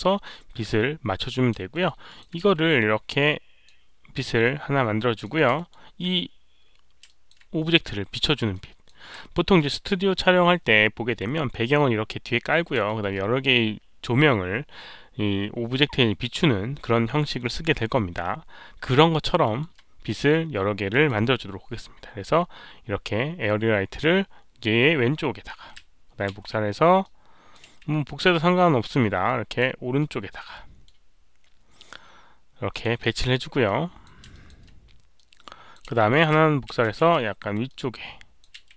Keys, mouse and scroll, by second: 1.7 alt+middle click, 2.0 alt+click, 2.4 w, 3.2-3.6 drag, 3.6 alt+middle click, 3.6 w, 4.4-5.2 alt+drag, 5.5 alt+middle click, 7.0 alt+click, 8.5-8.8 alt+drag, 9.3 alt+middle click, 11.8 alt+middle click, 11.8 alt+click, 11.8-12.1 scroll up 1, 12.8 alt+middle drag, 13.0 alt+click, 18.7-19.0 scroll up 1, 19.4 alt+middle click, 20.5-21.0 drag, 26.3 ctrl+d, 27.0 ctrl+d, 27.0-27.5 drag, 27.0 alt+middle click, 27.6 e, 29.2-29.5 drag, 29.9-30.8 middle drag, 32.7 click, 33.6-34.0 drag, 34.3 alt+click, 35.1 alt+click, 35.9 alt+middle drag, 36.7 ctrl+d, 37.0 e, 37.6-38.4 drag, 38.3-38.7 typing, 38.5 alt+middle click.